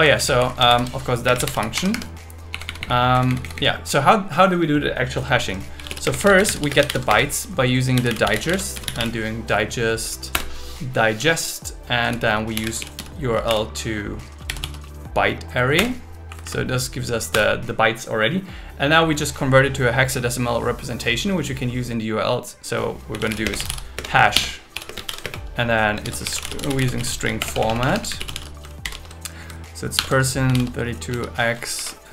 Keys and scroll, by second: 0.2 super+Left, 0.4 Right, 1.2 space, 1.8 Escape, 2.5 Up, 4.6 Down, 6.0 space, 6.9 shift+0, 7.1 space, 10.3 Return, 12.0 Left, 15.8 Return, 16.3 Right, 17.3 Return, 23.4-26.0 typing, 27.4 BackSpace, 28.8 shift+8, 29.3 shift+2, 30.0 shift+5, 31.8 Down.